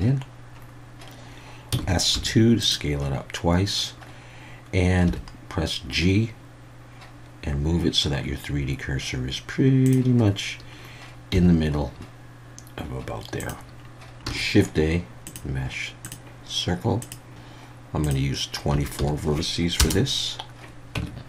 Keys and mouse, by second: 1.7 s, 2.1 2, 2.6 click, 5.1 g, 9.8 click, 11.3 g, 13.4 click, 14.2 shift+x, 14.2 shift+a, 17.0 click, 18.0-20.4 drag, 21.0 Tab.